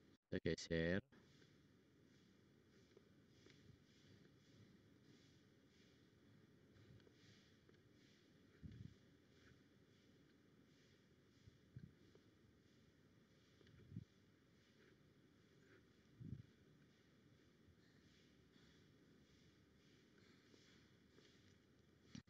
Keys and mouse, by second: 0.1-2.1 drag, 4.8 middle click, 10.2 click, 10.8-12.0 drag, 12.0 middle click, 12.6 middle click, 15.8 click, 16.6 click, 17.9 click, 17.9 middle click, 17.9 right click, 19.0-21.0 middle drag, 21.9 click.